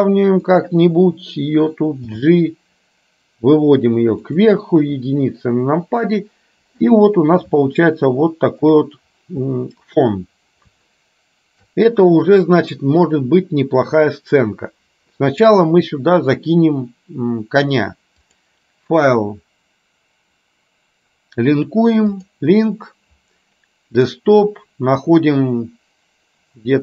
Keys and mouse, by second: 4.9 KP_1.